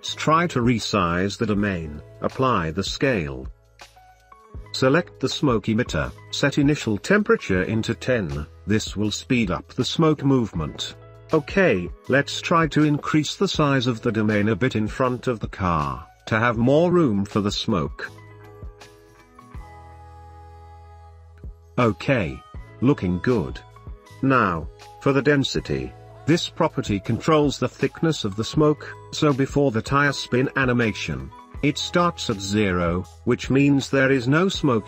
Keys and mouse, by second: 1.5 click, 2.2 ctrl+a, 6.4-7.6 drag, 7.8 space, 9.4 space, 10.0 shift+space, 10.1-10.5 shift+middle drag, 11.7 Tab, 14.2 g, 14.3 middle click, 16.7 Tab, 17.1 space, 21.2 space, 23.5 click, 24.2 ctrl+z, 25.3-26.5 drag, 29.7-31.1 drag, 32.6-33.1 drag, 33.2 Left, 34.0 click, 34.6-34.8 drag.